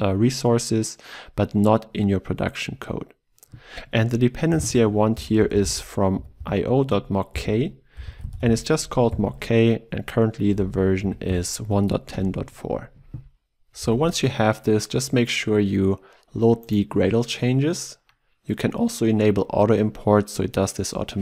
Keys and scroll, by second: 13.9 ctrl+s, 16.9 ctrl+shift+o.